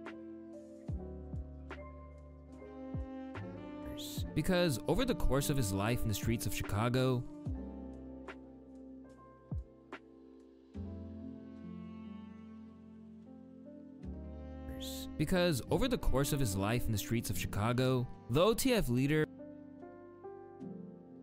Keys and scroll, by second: 1.6 ctrl+s, 9.1 p, 18.8 space.